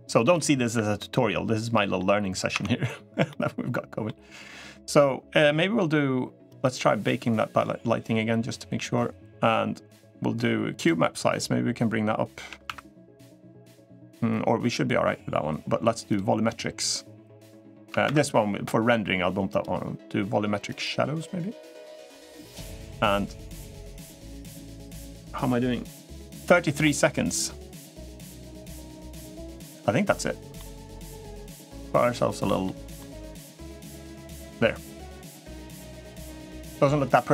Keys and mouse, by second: 0.0 click, 1.5 middle click, 2.3 Tab, 3.0-3.8 middle drag, 20.5-25.6 drag, 30.3 middle click, 31.0 middle click, 32.4-32.7 middle drag.